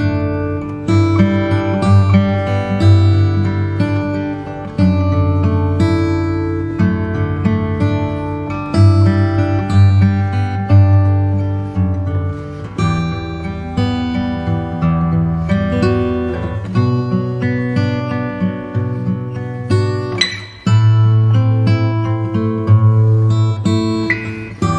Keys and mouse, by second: 1.4 KP_1, 4.7 click, 7.0 click, 12.1 click, 17.0 click, 18.9 click, 20.9 click, 23.7 click.